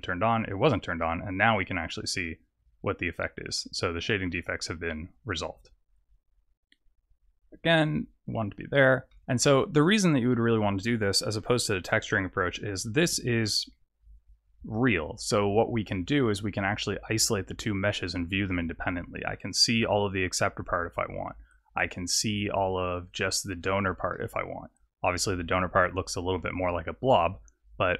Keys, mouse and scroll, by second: 1.0 middle click, 1.7-2.2 scroll down 3, 2.2 middle click, 4.0 middle click, 4.5 scroll down 2, 5.1 click, 6.6 click, 9.1 middle click, 11.2 middle click, 11.8 click, 13.4 middle click, 17.1 click, 18.4 middle click, 23.1 click, 23.6 click, 24.1 middle click.